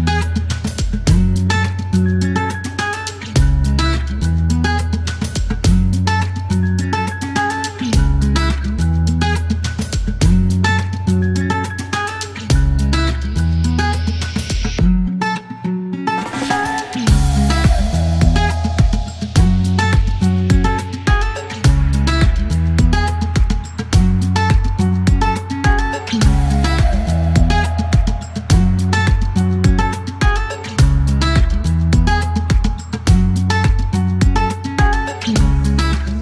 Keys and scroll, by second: 2.2 KP_Subtract.